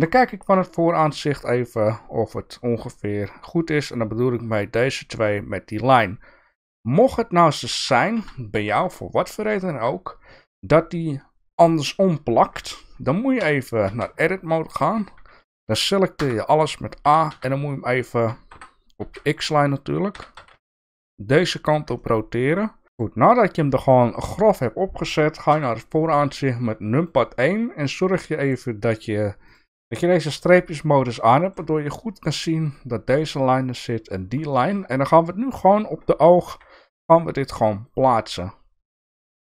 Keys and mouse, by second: 0.5 KP_1, 1.4 shift+middle click, 7.7 ctrl+z, 8.2 ctrl+z, 8.9 middle click, 13.4 KP_3, 13.8 Tab, 14.5 shift+middle click, 16.2 a, 17.0 r, 19.0 x, 20.1 r, 22.0 middle click, 22.8 g, 25.5 KP_1, 26.6 shift+middle click, 29.5 click, 31.3 shift+middle click, 34.5 shift+middle click, 36.4 g.